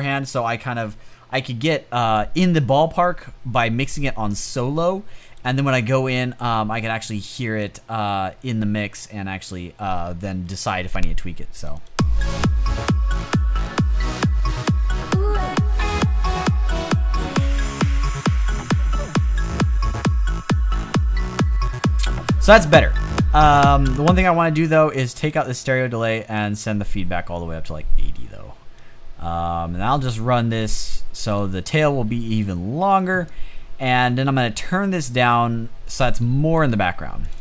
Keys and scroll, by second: 23.7 space.